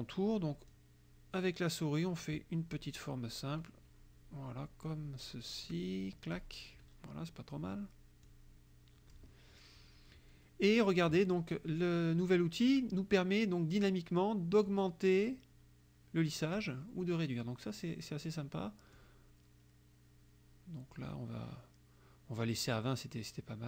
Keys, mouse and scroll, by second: 0.8-6.6 drag, 8.3-9.4 drag, 14.7-16.8 drag, 19.0-23.6 drag.